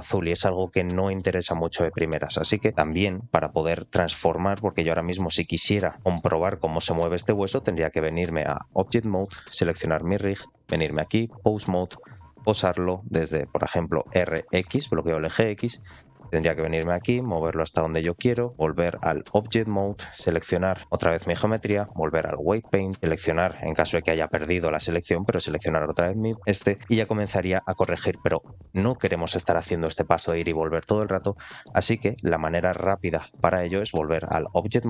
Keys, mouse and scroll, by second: 2.6 click, 4.6-5.0 scroll up 3, 5.0 shift+middle click, 6.0 middle click, 6.5 scroll up 2, 6.8 shift+middle click, 7.8-8.5 drag, 9.2 click, 10.4-11.2 drag, 11.8 click, 12.0 middle drag, 12.3-13.6 scroll down 2, 13.8 r, 18.6-19.1 drag, 19.9 click, 21.4-22.3 drag, 24.0 click, 24.9 click, 25.9 middle click, 26.4 scroll up 2, 26.6 middle click, 32.4-33.8 drag, 34.5-34.8 scroll down 5.